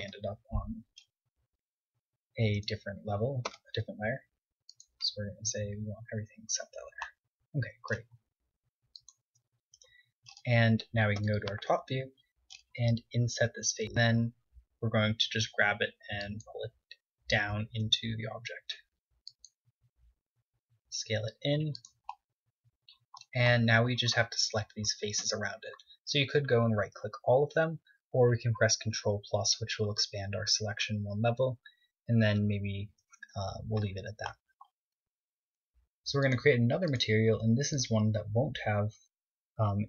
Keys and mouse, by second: 0.3 Tab, 1.2-3.0 right drag, 2.1 m, 5.2 right drag, 7.5-9.3 drag, 8.2-9.6 right drag, 9.1 middle click, 9.6 KP_7, 14.8 KP_1, 15.8 g, 17.3 click, 18.3 g, 20.5 z, 21.0 s, 22.7-24.3 drag, 25.9 z, 29.6 ctrl+KP_Add, 33.6 ctrl+KP_Subtract, 35.1-36.6 middle drag.